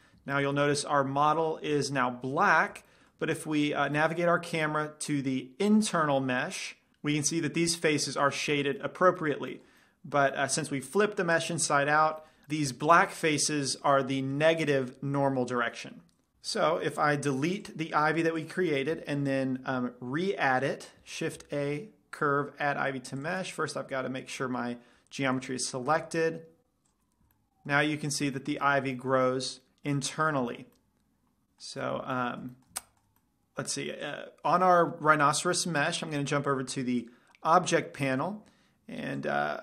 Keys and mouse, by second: 0.0 Tab, 0.5-2.8 middle drag, 8.0-10.3 middle drag, 17.8-19.0 drag, 18.3 x, 19.5-21.0 middle drag, 21.7 shift+a, 23.4-25.0 drag, 26.2 shift+a, 27.3 z, 27.4-29.1 middle drag, 29.2-30.5 middle drag, 30.7-31.5 middle drag, 31.7 middle click, 32.1 z, 32.2-32.7 middle drag, 32.8-33.2 middle drag, 33.6-35.8 middle drag, 34.3-39.1 drag, 34.3-35.3 right drag.